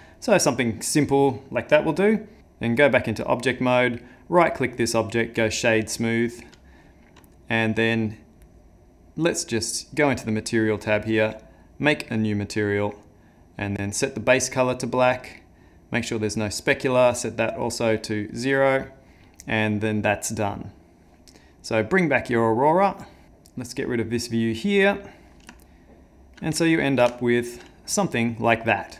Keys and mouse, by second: 2.4 Tab, 2.4 click, 3.9 right click, 22.9 click, 23.2 click, 24.2 click, 25.6 shift+middle click, 26.6 ctrl+middle click, 27.2 shift+middle click.